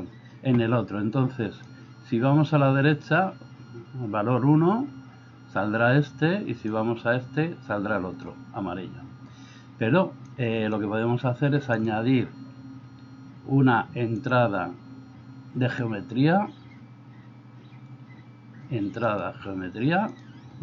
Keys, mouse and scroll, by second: 1.8 click, 6.7-8.4 drag, 10.3 click, 11.9-20.2 drag.